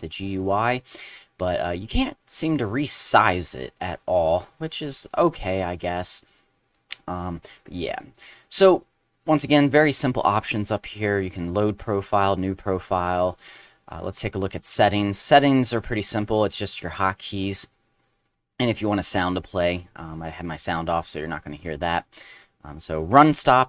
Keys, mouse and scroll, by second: 3.5 click, 3.7 click, 5.6-6.7 drag, 8.0 click, 9.4 click, 13.9 click.